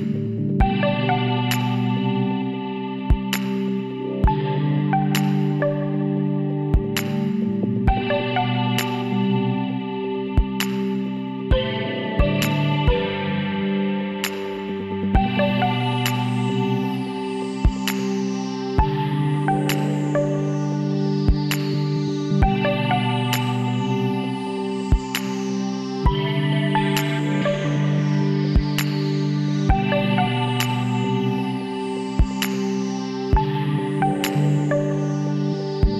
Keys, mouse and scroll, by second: 1.8 right click, 4.5 middle click, 6.9 middle click, 8.9-10.5 right drag, 10.2 w, 10.5 middle click, 20.8-22.1 middle drag, 21.7 Tab, 23.2 Tab, 25.6 l, 29.4 ctrl+n, 31.3 Tab, 32.5 click, 33.4 a, 33.6 click.